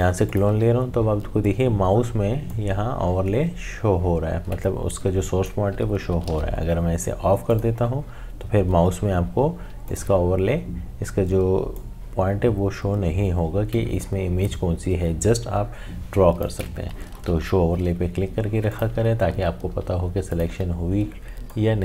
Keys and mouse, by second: 0.3 alt+click, 2.5-6.3 drag, 6.3 ctrl+z, 7.5-17.1 drag, 17.1 ctrl+z, 18.7 click, 20.3-21.8 alt+drag.